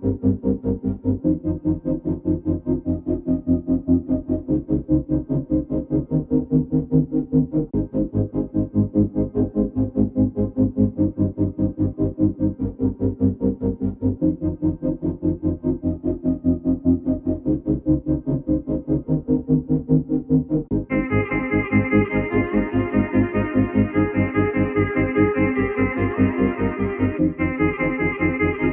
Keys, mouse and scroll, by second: 1.5 shift+z, 27.0 shift+z.